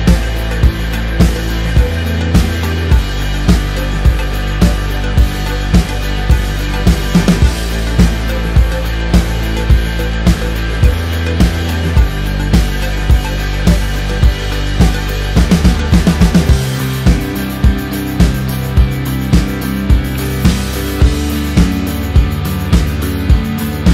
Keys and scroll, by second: 18.1 ctrl+z.